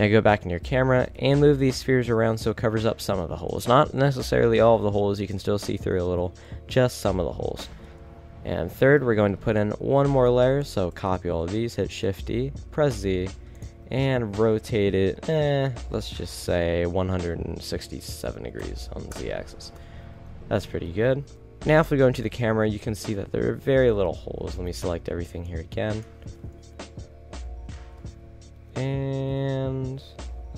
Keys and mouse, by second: 0.4 g, 4.8 a, 7.8 KP_1, 8.4 z, 9.2 b, 12.0 shift+d, 13.7 z, 14.7 r, 19.7 KP_7, 21.4 KP_0, 21.4 z, 22.1 a, 23.2 middle drag, 23.8-25.5 typing, 26.6 KP_7, 26.9 z, 27.9 z, 28.9 g.